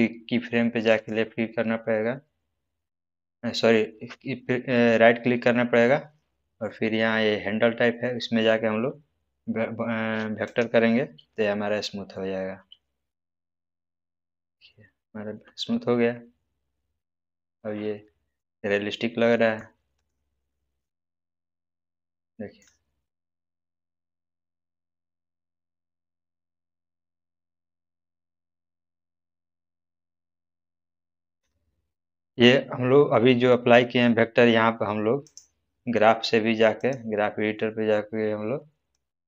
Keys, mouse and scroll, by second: 2.9 right click, 10.4 click, 17.2 click, 17.2-18.5 middle drag, 18.7-19.0 scroll down 1, 19.3 middle click, 19.9 click, 20.4-21.1 middle drag, 27.6 scroll up 1, 29.8 scroll down 1, 30.4-31.3 middle click, 31.6-32.4 scroll down 1, 35.2-39.2 drag.